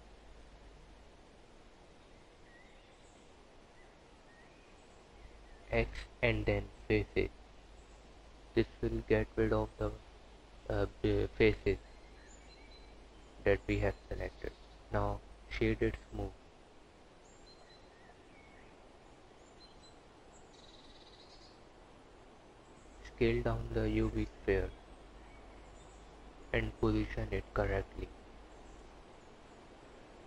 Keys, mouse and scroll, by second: 0.4 click, 4.9 x, 9.1 Tab, 11.5 alt+z, 12.7 click, 15.3 right click, 20.6 click, 24.0-25.9 typing, 27.6 KP_Decimal, 28.2 KP_3, 29.4 s.